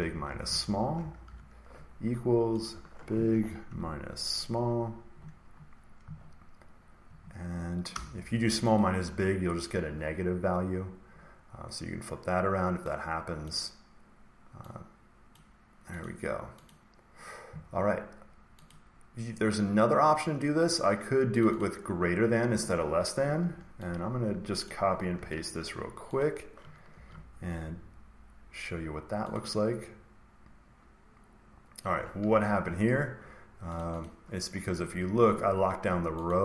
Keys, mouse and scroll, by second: 0.4 shift+Right, 0.9-1.7 typing, 1.6-2.2 scroll, 2.6 click, 2.6 scroll, 3.6 typing, 4.4 click, 7.8 Return, 8.7 click, 13.4 click, 15.3 click, 16.0 click, 16.6 click, 18.6 click, 21.3 click, 21.5 click, 23.1 Escape, 24.6 click, 25.1 ctrl+c, 26.1 click, 26.9 ctrl+v, 29.3 click, 29.4 click, 32.5 click, 34.0 click, 36.2 click.